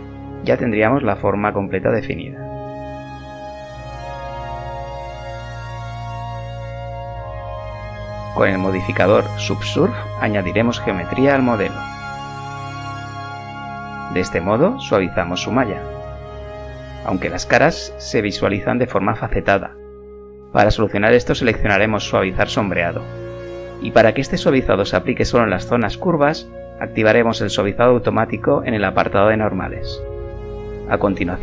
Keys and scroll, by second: 29.2 Tab, 30.3 z, 31.3 2.